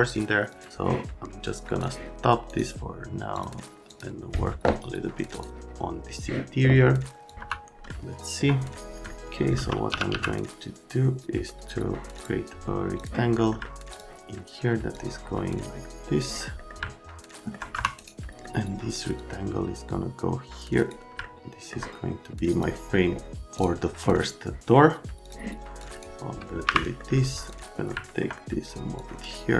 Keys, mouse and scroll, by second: 0.5 click, 1.7 click, 2.5 scroll up 2, 3.3 click, 3.9 click, 5.3 click, 7.3 click, 7.4 F3, 7.8 alt+middle click, 9.6 middle click, 9.6-10.6 typing, 9.8 middle click, 11.5 middle click, 12.1 click, 13.0 click, 13.4 middle click, 13.6 alt+middle click, 13.9 click, 14.9 click, 16.6 middle click, 16.8 alt+middle click, 17.7 F3, 19.2 click, 21.2 alt+middle click, 21.6 right click, 22.5 click, 23.5 click, 25.2 click, 25.8 click, 26.6 Delete, 26.8 right click, 27.5 click, 27.9 alt+middle click, 29.0 click.